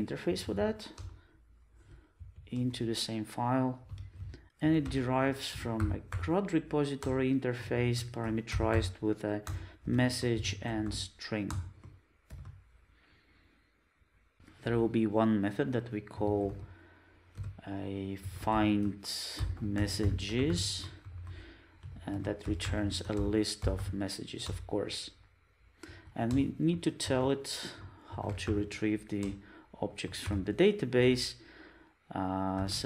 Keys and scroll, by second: 4.4 super+z, 7.1 Return, 24.4 Return, 29.4 Return.